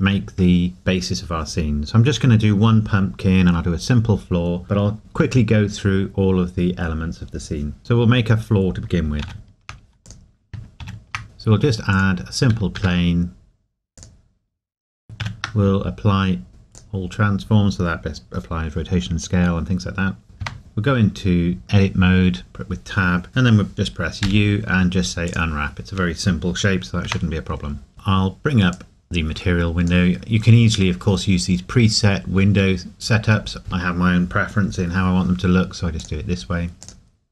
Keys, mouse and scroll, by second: 11.9 click, 12.8 s, 13.9 click, 16.7 click, 20.4 Tab, 24.2 u, 27.1 Tab, 36.0 click, 36.8 click.